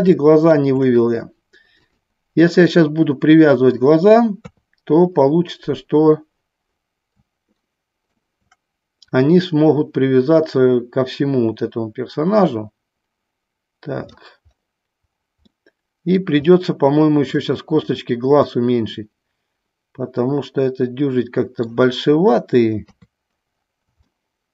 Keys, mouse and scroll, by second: 0.4 shift+middle click, 2.8-4.1 middle drag, 4.6 KP_3, 7.7 shift+middle click, 9.2-14.3 drag, 15.5 middle click, 16.5 middle click, 18.7-22.0 middle drag, 23.0 KP_3, 24.2 middle click.